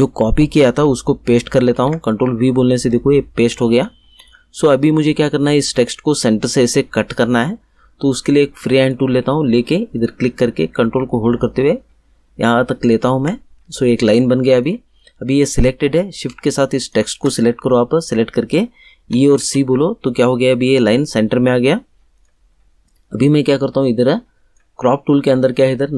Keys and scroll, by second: 1.7 ctrl+v, 18.9 e, 19.4 c.